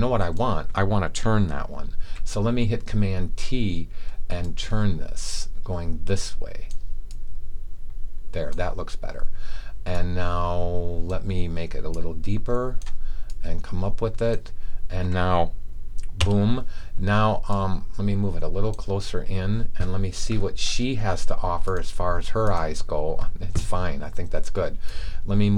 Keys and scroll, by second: 1.9 super+t.